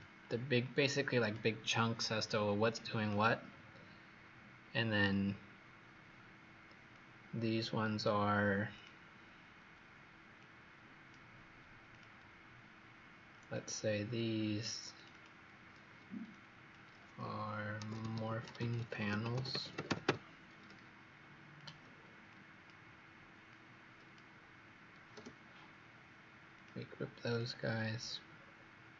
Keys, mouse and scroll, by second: 3.4-4.1 scroll up 6, 4.3 scroll down 1, 7.0 click, 15.0 click, 16.2 click, 17.5-20.5 typing, 21.5 click, 26.4 click, 28.3-28.9 scroll down 3.